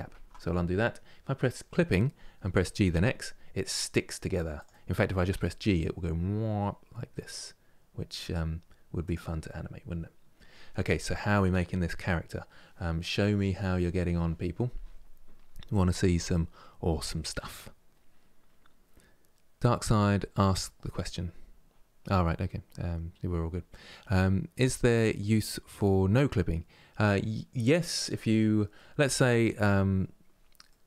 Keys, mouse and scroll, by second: 1.1 click, 2.2 g, 5.0 g, 9.1-12.2 middle drag, 28.4-29.7 middle drag, 29.7-30.0 scroll up 2, 30.3-30.8 middle drag.